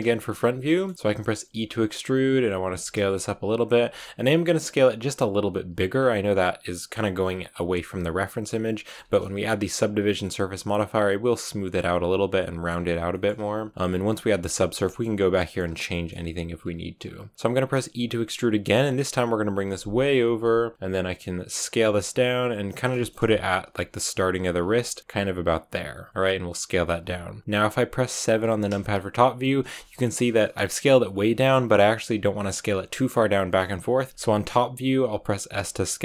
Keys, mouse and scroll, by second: 0.5 shift+middle click, 1.5 e, 2.6 s, 3.7 g, 4.0 s, 5.8-7.5 scroll up 1, 7.5 scroll up 1, 7.6 s, 8.8-13.7 shift+middle drag, 13.7 click, 13.8 s, 14.6 scroll down 2, 14.7-17.8 shift+middle drag, 17.8 e, 21.6 s, 22.8 shift+middle click, 23.0-23.3 shift+scroll up 3, 23.4 g, 24.1 s, 24.7 shift+middle click, 25.0 s, 26.1 g, 27.4 KP_1, 28.2 KP_7, 35.4 s.